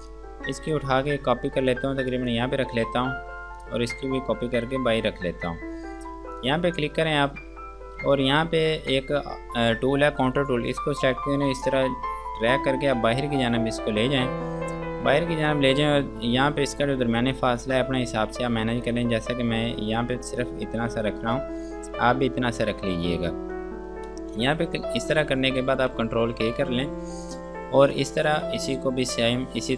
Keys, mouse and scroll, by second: 0.2 click, 2.4 right click, 3.8 click, 4.6 ctrl+r, 5.1 scroll down 1, 6.0 scroll up 1, 6.6 click, 6.9-8.4 scroll down 1, 8.4 click, 15.0 F2, 15.4 click, 21.9 scroll down 1, 24.3 ctrl+space, 25.0 scroll down 1, 26.8 ctrl+k, 27.5 click, 28.7 F2, 29.0 click.